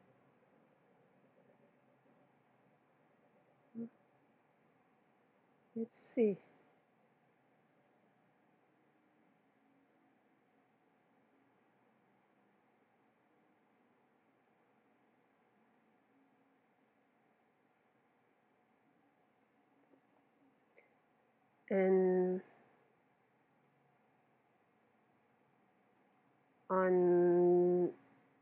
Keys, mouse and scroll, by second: 4.0 x, 5.4 KP_0, 7.7-10.3 drag, 10.3-14.5 middle drag, 14.5-16.2 drag, 16.6-20.3 middle drag, 20.3 KP_0, 21.7-23.2 drag, 26.0-27.8 right drag.